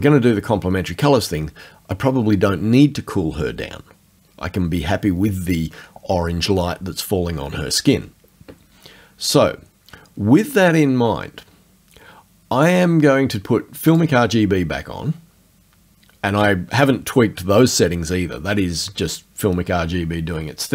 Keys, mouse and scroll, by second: 13.9 click.